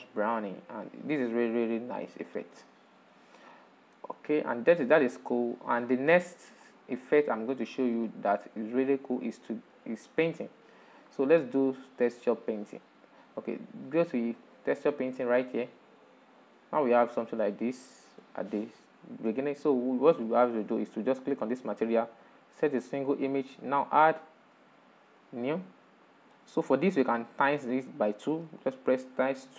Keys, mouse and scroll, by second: 2.4 middle click, 3.3-3.9 scroll down 5, 4.2-7.9 middle drag, 7.9 scroll up 2, 8.4-11.7 middle drag, 11.7 scroll down 7, 12.4-13.2 shift+middle drag, 13.2 click, 15.5 click, 18.3-18.7 scroll up 10, 18.9-23.0 shift+middle drag, 23.0-29.5 drag.